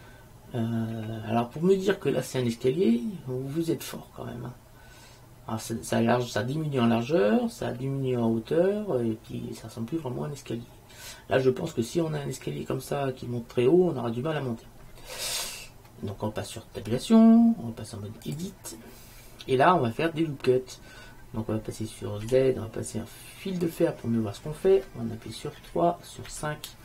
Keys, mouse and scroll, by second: 1.1 click, 7.9-8.4 middle drag, 8.5 middle click, 8.7 middle click, 16.9 Tab, 22.4 z, 25.7 KP_3, 26.4 KP_5.